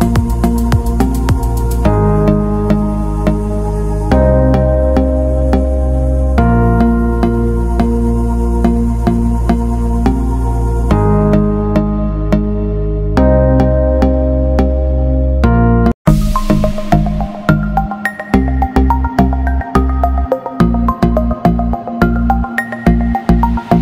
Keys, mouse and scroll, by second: 1.9 scroll down 1, 2.4 click, 2.9-3.5 scroll down 1, 3.5 click, 4.0-4.5 scroll down 1, 4.5 click, 5.0-5.6 scroll down 1, 5.6 click, 17.2 b, 19.5 click.